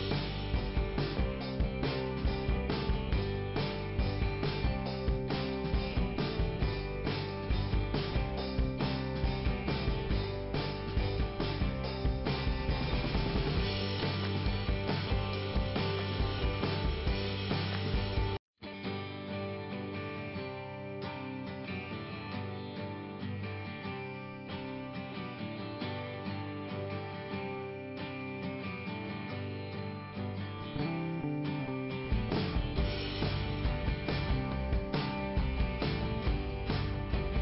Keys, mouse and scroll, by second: 2.7 click, 2.8 click, 4.4-5.5 scroll down 1, 5.9 middle click, 8.7 click, 14.3 click, 14.9 right click, 15.7 middle click, 16.4 scroll up 2, 17.5 right click, 18.9 click, 20.4 click, 22.9 right click, 23.1 right click, 23.2 right click, 23.4 right click, 23.6 right click, 23.6 click, 23.7 right click, 23.9 right click, 24.2 right click, 25.4-26.4 scroll up 1, 27.3 click, 29.1 click, 29.7 scroll up 2, 31.2 right click, 32.5 click, 34.3 click, 36.1 click, 36.5 click, 37.1 right click.